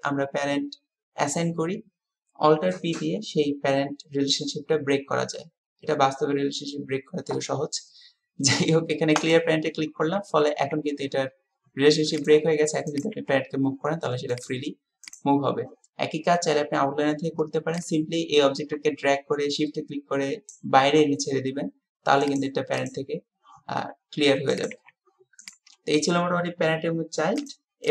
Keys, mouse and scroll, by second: 10.6 g, 13.0 click, 13.3 g, 15.0 click, 17.9-20.6 drag, 22.3 click, 24.5 click.